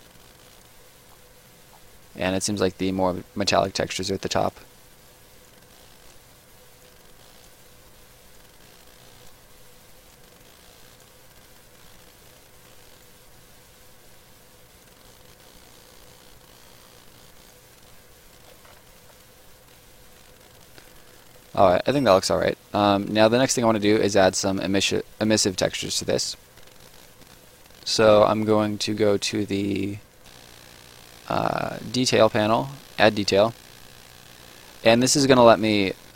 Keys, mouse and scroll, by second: 1.1-3.7 scroll up 1, 3.7 click, 11.2 right click, 14.8 click, 17.7 right click, 18.6 ctrl+right click, 18.7 ctrl+z, 19.4 right click, 21.7 space, 21.8 right click, 25.2-25.6 scroll up 1, 25.6 right click, 26.2 scroll up 1, 26.4 right click, 29.7 click, 33.5 scroll down 1, 33.8 middle click, 35.0 right click.